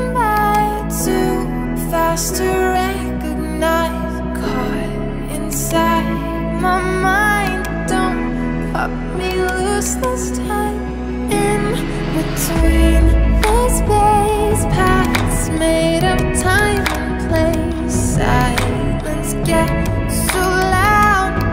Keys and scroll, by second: 11.4 ], 12.9 [.